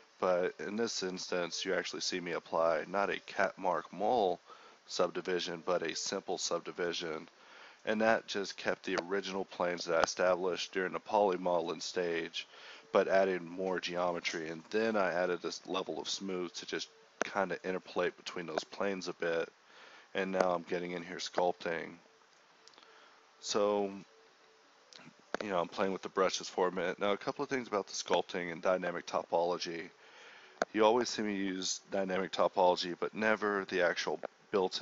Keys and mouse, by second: 0.9 [, 1.2 [, 7.3 ctrl+z, 25.3-25.6 [, 26.4 ctrl+z, 27.1 click, 27.6-27.9 ], 28.1-28.5 drag, 28.5 [, 28.8 [, 28.9-30.8 drag, 31.2 ], 31.8 [.